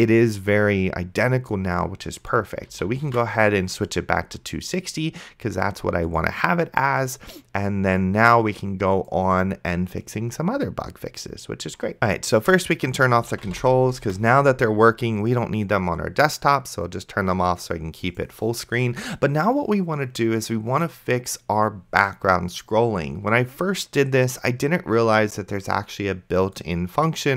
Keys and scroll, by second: 3.4 s, 13.1-14.0 typing, 14.3 ctrl+s.